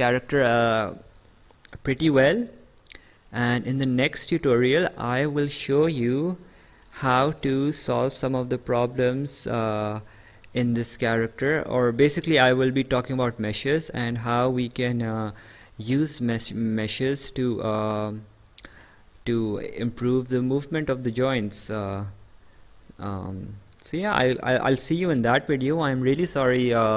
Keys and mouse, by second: 0.4 right click, 3.1 right click, 18.1 right click, 23.0 right click.